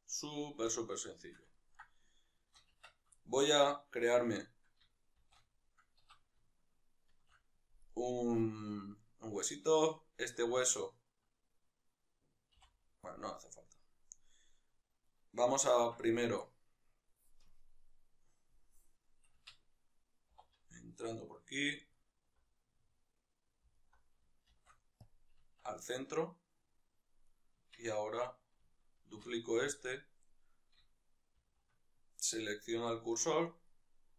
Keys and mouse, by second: 0.7 alt+q, 1.2 shift+middle click, 2.9 Tab, 3.2 shift+middle click, 4.1 right click, 7.1 shift+a, 7.9-13.1 right drag, 13.1 x, 13.9-16.0 right drag, 16.0 Tab, 16.2 right click, 16.4-19.4 middle drag, 19.4 Tab, 19.4 click, 20.3 2, 21.9-22.6 alt+right drag, 22.6-23.8 middle drag, 23.8-25.1 alt+right drag, 25.1 shift+s, 25.6 Tab, 25.9-27.3 middle drag, 27.3-27.9 right drag, 27.9 Tab, 28.3 right click, 29.0 shift+d, 29.9 click, 32.5 shift+s, 33.7 right click.